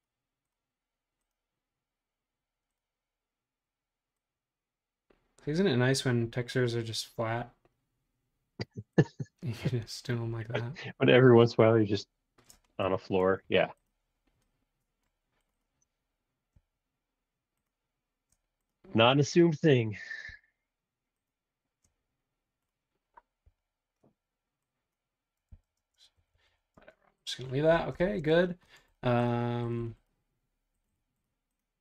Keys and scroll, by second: 12.8 Return, 13.2 space, 13.3 ⟲, 23.5 e, 25.6 super+z, 25.8-26.7 typing, 28.2 super+z.